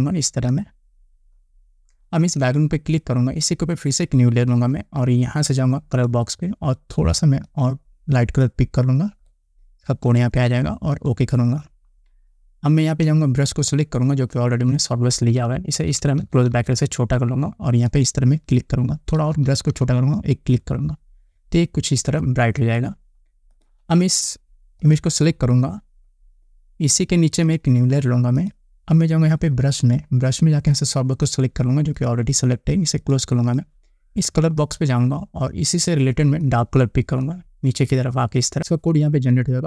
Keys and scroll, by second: 15.4 [, 19.2 [.